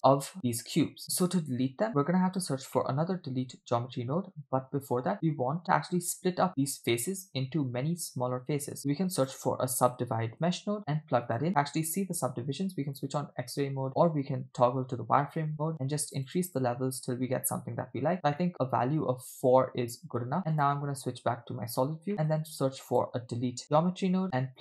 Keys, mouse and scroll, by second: 0.2 scroll up 1, 0.3-0.9 scroll down 1, 0.9 scroll down 1, 1.0 middle click, 1.9 scroll up 1, 2.5 scroll down 1, 2.8 middle click, 3.3 shift+a, 8.8 shift+a, 13.9 click, 16.1 click, 16.5 click, 17.5-18.3 scroll up 2, 18.4-20.2 middle drag, 20.7 click, 22.1 middle click, 22.2 shift+a.